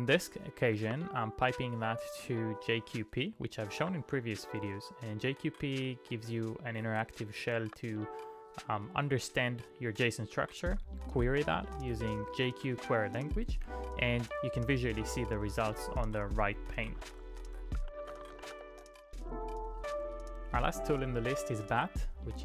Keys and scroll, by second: 0.7 shift+\, 1.1 space, 2.8-4.3 typing, 7.6 typing, 9.3-10.7 typing, 10.2 Return, 11.1 Return, 12.8 [, 13.1 Return, 13.1 ], 16.1-19.0 typing.